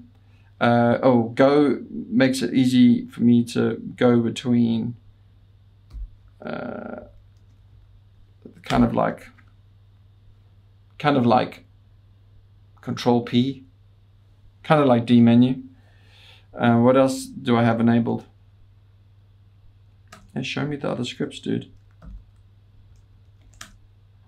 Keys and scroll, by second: 5.9 alt+g, 6.9-8.4 typing, 8.7 Return, 19.6 Return, 19.6 typing, 20.2 Return, 21.0 BackSpace, 21.1 BackSpace, 21.3 BackSpace, 21.5 BackSpace, 22.1 ctrl+l, 22.2 ctrl+l, 22.6-24.1 typing.